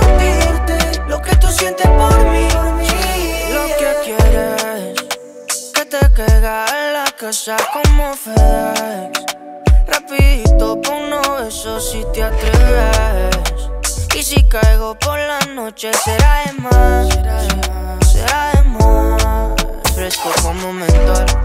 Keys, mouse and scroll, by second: 1.9 Up, 11.4-18.6 drag, 18.9-19.4 scroll up 1, 19.4-20.4 middle click, 20.5-21.1 drag.